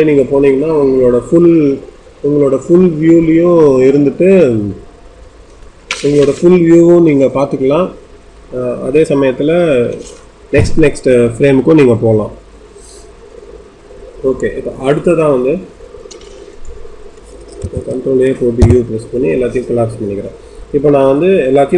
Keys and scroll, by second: 18.5 u.